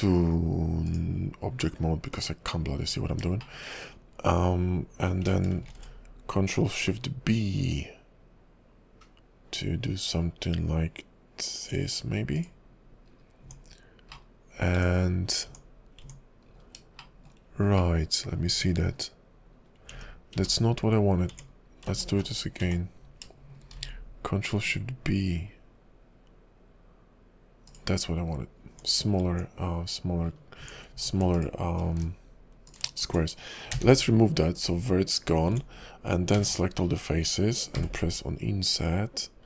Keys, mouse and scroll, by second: 0.8 click, 2.8 KP_5, 3.4 shift+middle click, 3.7 scroll up 1, 5.7 ctrl+shift+b, 13.1-14.1 scroll up 3, 13.4 Tab, 14.1 middle click, 14.1-14.7 scroll down 4, 14.7 Tab, 15.5 Tab, 16.0 Tab, 16.5-16.8 scroll up 3, 17.0 shift+middle click, 17.8 middle click, 18.4-19.5 scroll up 6, 19.5 scroll down 2, 19.9 ctrl+z, 20.5 ctrl+z, 20.5 middle click, 21.3 Tab, 22.0 ctrl+z, 22.2 ctrl+z, 22.6 ctrl+z, 23.7 ctrl+shift+b, 27.9-28.7 scroll down 4, 28.7 Tab, 29.2 Tab, 30.2-30.6 scroll down 2, 30.6 Tab, 31.3 alt+click, 32.6 alt+shift+click, 33.7 x, 35.5 Tab, 36.3 a, 36.8-37.7 scroll up 3, 37.7 i.